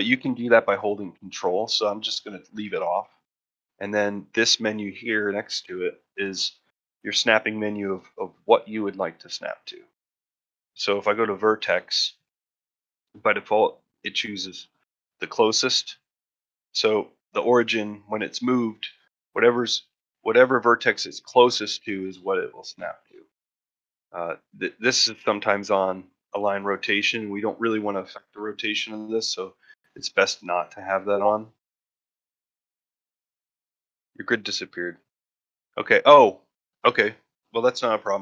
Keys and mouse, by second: 5.2-27.5 drag, 30.2-38.2 drag.